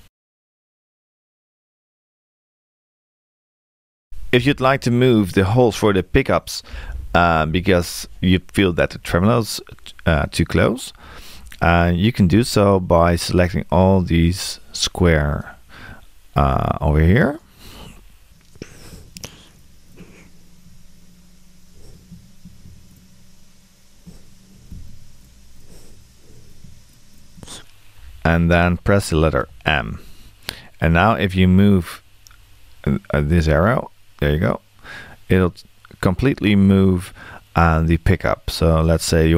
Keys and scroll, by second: 29.4 shift+m.